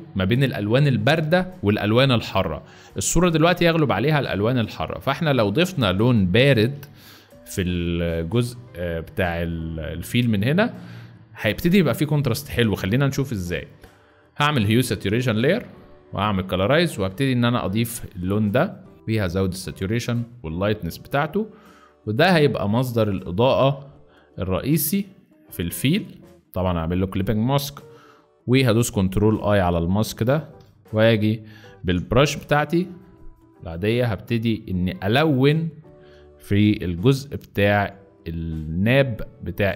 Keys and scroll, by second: 4.5 z, 6.4 v, 26.5 ctrl+alt+z, 28.6 ctrl+i, 30.1 ctrl+i, 31.1 z, 32.1 b, 35.4 z, 36.7-37.9 typing.